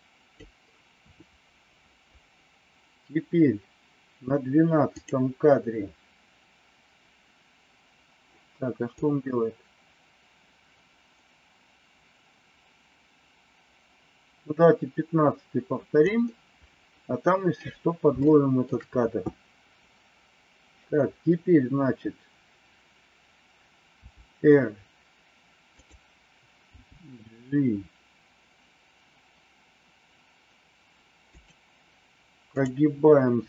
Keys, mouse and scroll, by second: 8.9-16.0 drag, 18.2 shift+middle click, 24.0 r, 26.6 g, 32.6 click.